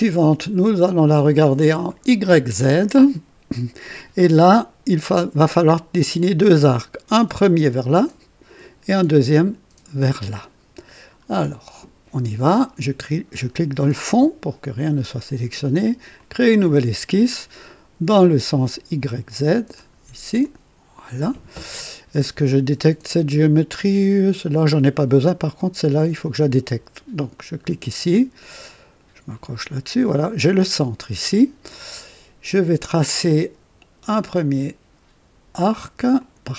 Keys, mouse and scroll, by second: 1.7 click, 2.6 right click, 10.9 scroll up 2, 11.2 right click, 13.7 click, 16.1 click, 19.7 click, 20.4 click, 27.3 click, 29.2 click, 36.1 click.